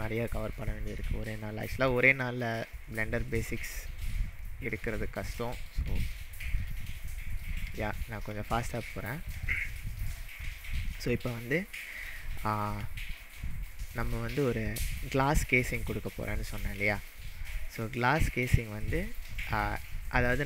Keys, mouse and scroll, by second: 6.3-6.7 shift+middle drag, 11.1 click, 11.9-12.8 scroll up 4, 13.2-14.0 shift+middle drag, 16.4 scroll down 4, 17.0-17.8 shift+middle drag, 19.5-19.9 scroll up 3, 20.4 click.